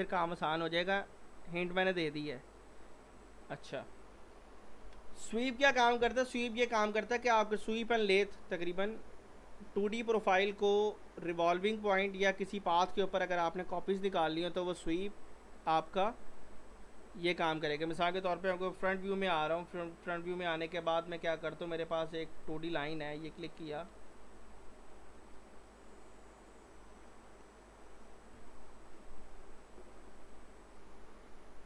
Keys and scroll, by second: 4.8 Delete, 18.5 f, 18.9 z, 23.1 typing, 23.9 Escape.